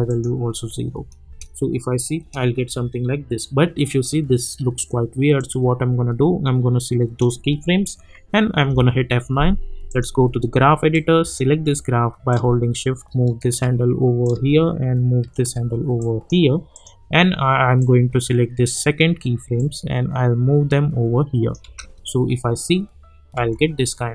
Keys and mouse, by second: 1.2 space, 5.3-8.7 drag, 8.7 F9, 9.9-14.2 drag, 14.2-21.6 drag, 21.6 space.